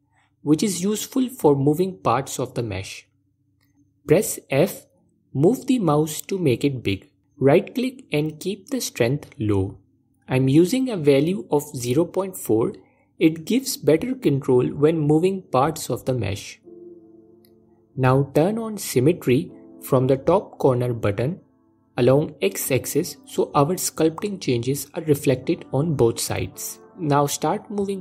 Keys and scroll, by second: 4.0 f.